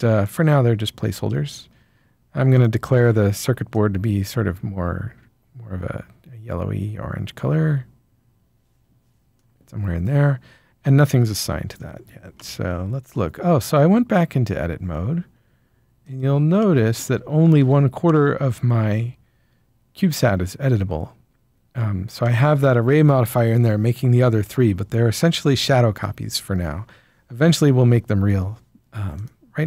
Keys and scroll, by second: 11.4 Tab, 17.1 Tab, 17.5 Tab.